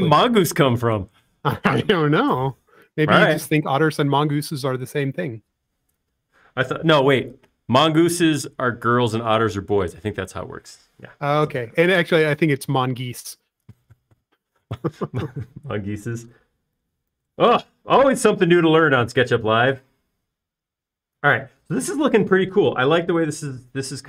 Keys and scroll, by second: 18.2 super+s.